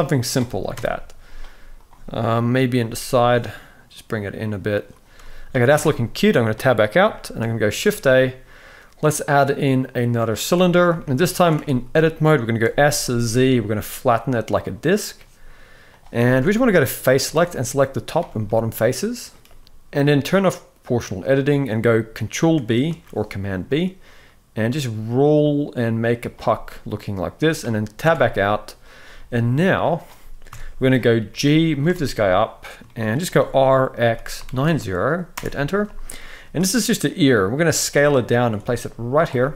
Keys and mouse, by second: 0.4 KP_4, 0.5 KP_1, 1.5 click, 2.5 g, 5.5 Tab, 6.8 shift+middle click, 7.5 shift+a, 10.7 shift+middle drag, 11.2 Tab, 12.3 s, 15.9 z, 18.1 middle click, 19.6 z, 20.9 click, 22.6 ctrl+b, 26.2-27.2 middle drag, 27.7 Tab, 28.8 z, 30.2 KP_1, 31.0 g, 31.6 shift+middle click, 32.6 shift+middle click, 33.1 r, 35.8 shift+middle click, 36.1 s, 37.5 g, 38.3 s, 39.1 shift+middle drag.